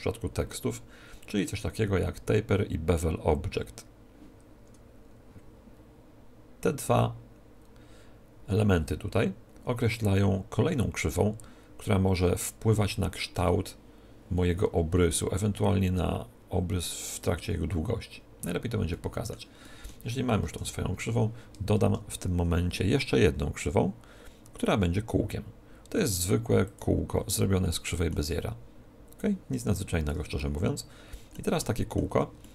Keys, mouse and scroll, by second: 18.2-21.3 middle drag, 20.3 KP_1, 21.7 shift+a, 27.6-29.1 middle drag, 28.1 z, 29.1-30.9 drag, 30.3-31.8 middle drag, 32.0 Tab.